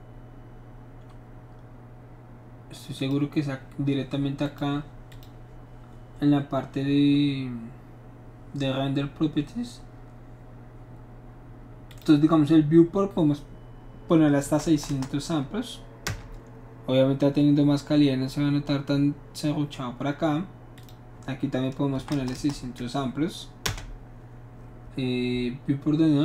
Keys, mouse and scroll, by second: 3.0 click, 4.4 click, 5.1 click, 11.9 click, 14.7 KP_6, 14.7 KP_0, 14.9 KP_0, 16.0 Return, 20.8 click, 22.0 KP_6, 22.1 KP_0, 22.3 KP_0, 23.6 Return.